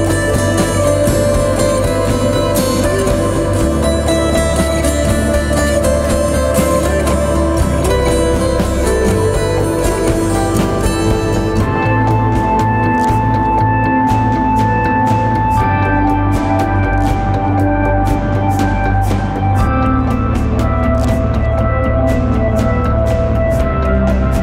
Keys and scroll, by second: 2.7 ctrl+z, 5.2 ctrl+z, 6.6 4, 7.7-9.9 typing, 23.3 ctrl+z.